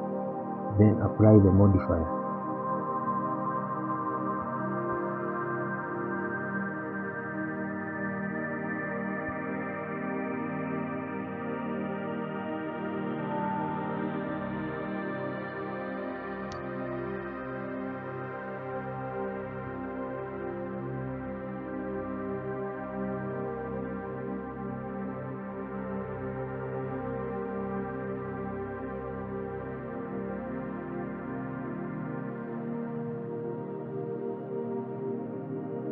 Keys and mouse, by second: 3.0-3.3 shift+middle drag, 3.5 Page_Up, 3.9 middle drag, 5.7 click, 6.9-7.3 shift+middle drag, 10.2 shift+click, 11.7 ctrl+p, 16.2-18.4 drag, 20.1-21.1 drag, 21.9 click, 25.9 click, 26.7 click, 28.1 click, 30.1-33.2 drag, 35.2-35.9 drag.